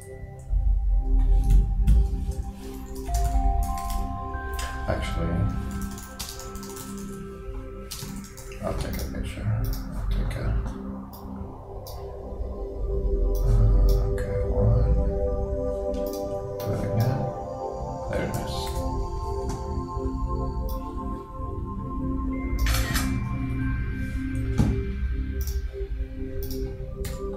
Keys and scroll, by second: 1.6 super+z, 2.4 super+Return, 3.0 shift+e, 18.8 shift+super+4.